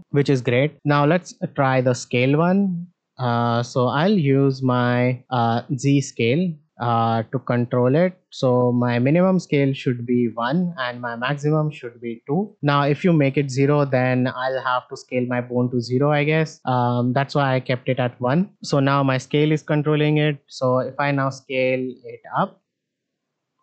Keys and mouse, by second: 0.0 r, 2.4-5.7 drag, 8.3-10.5 drag, 11.2-12.3 drag.